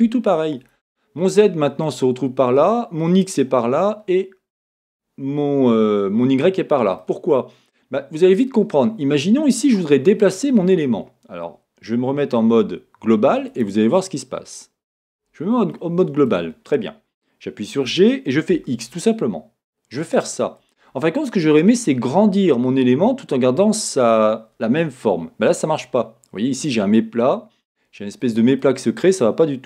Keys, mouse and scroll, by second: 13.5-15.7 drag, 15.7-20.5 middle drag, 17.9 g, 20.7 click, 23.1-29.6 middle drag, 27.2 scroll.